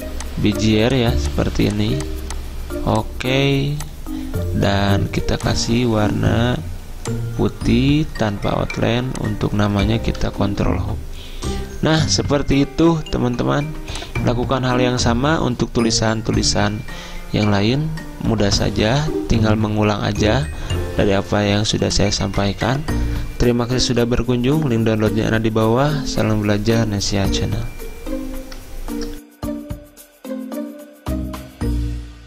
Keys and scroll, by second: 10.3 ctrl+Home, 13.6 z.